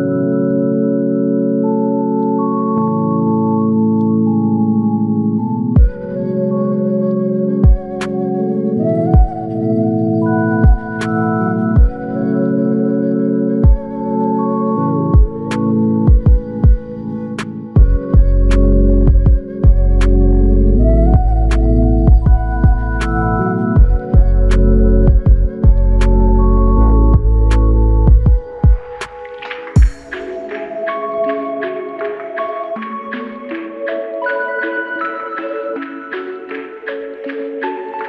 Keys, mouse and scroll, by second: 1.2 double click, 2.5 shift+click, 6.8 typing, 6.8 alt+click, 12.2 ctrl+alt+click, 17.5 alt+shift+click, 18.2 ctrl+alt+click, 20.9 double click, 22.8 ctrl+click, 26.1 ctrl+click, 27.9 alt+click, 31.0 shift+click, 33.7 double click, 34.8 alt+click, 36.4 shift+click, 37.1 ctrl+alt+click.